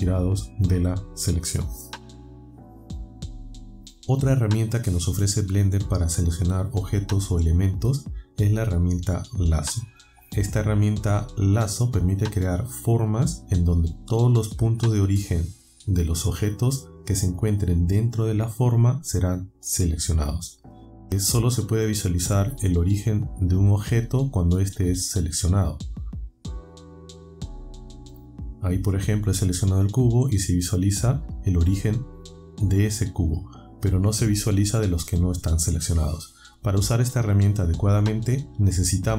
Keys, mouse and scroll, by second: 27.6 click.